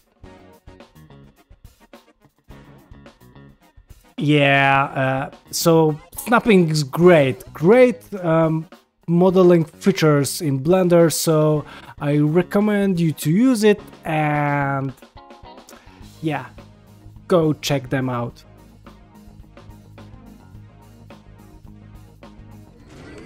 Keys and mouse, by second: 1.4-4.1 ctrl+middle drag, 4.6 middle click, 5.0 ctrl+middle click, 7.7 ctrl+Tab, 8.3 shift+middle click, 8.6 middle click, 9.4 shift+middle click, 9.7 ctrl+middle click, 10.0 shift+middle drag, 10.3 middle click, 11.0 shift+middle click, 11.3 ctrl+middle click, 11.5 middle click, 12.0 drag, 12.3 click, 12.6 g, 13.3 ctrl+shift+middle drag, 13.6 middle click, 14.3 middle click, 14.8 shift+middle click, 15.3-16.0 shift+middle drag, 16.1 shift+middle drag, 16.4-16.9 middle drag, 17.1 shift+middle click.